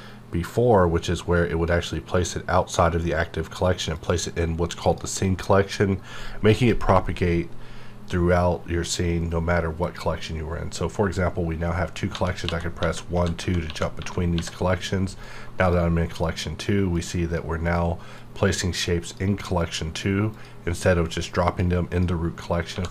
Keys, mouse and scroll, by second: 9.2 click, 9.8 click, 12.1-14.3 typing, 15.2-21.9 drag, 22.7 1.